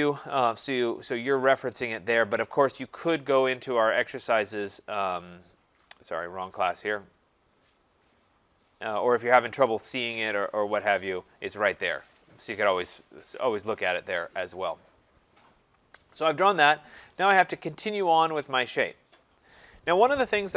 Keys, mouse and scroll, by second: 1.5 click, 7.0 click, 9.6 click, 10.7 scroll, 12.2 click, 13.3-14.5 scroll, 14.9 click.